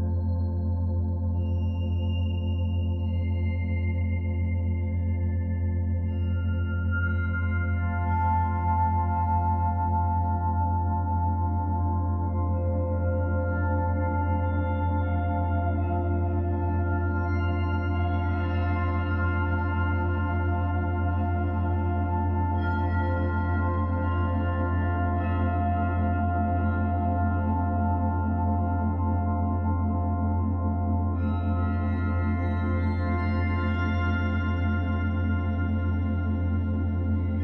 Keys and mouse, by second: 0.1 typing, 0.8-2.6 drag, 2.4-3.1 typing, 3.9-5.7 drag, 4.3-5.0 typing, 10.3-12.8 drag, 15.7-17.9 drag, 17.9 j, 19.8 click, 20.9-25.2 alt+drag, 26.6 click, 27.2-28.1 typing, 29.5-31.6 drag, 32.3 alt+click, 34.0 typing, 34.5-37.4 ctrl+alt+drag.